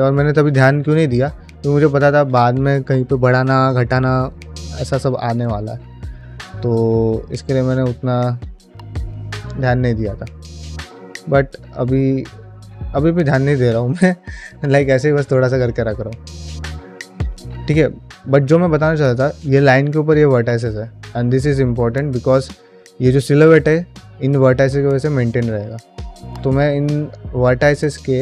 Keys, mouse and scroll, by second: 0.5 click, 0.7 shift+g, 1.5 g, 2.4 middle click, 5.2 click, 6.6 ctrl+click, 6.8 q, 10.5 ctrl+middle click, 10.7 middle click, 11.4 g, 12.3 middle click, 12.7 ctrl+middle click, 13.1 ctrl+z, 13.7 g, 15.3 shift+middle click, 15.6 ctrl+middle click, 15.8 middle click, 17.0 shift+middle click, 17.3 ctrl+middle click, 17.8 middle click, 18.4 shift+middle click, 21.5 middle click.